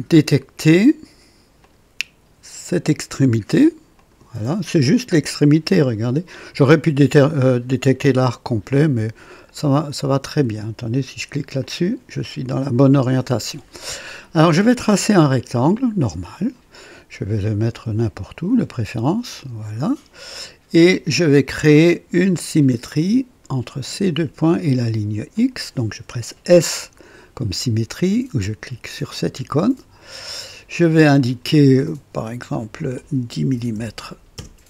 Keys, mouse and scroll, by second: 1.6 click, 3.9 click, 5.8 ctrl+alt+click, 11.6 click, 16.3 click, 17.7 click, 19.3 click, 20.1 right click, 22.5 click, 24.0 click, 25.3 click, 29.2 s, 31.1 click, 32.4 click, 33.5 KP_1, 33.7 KP_0, 34.3 Return.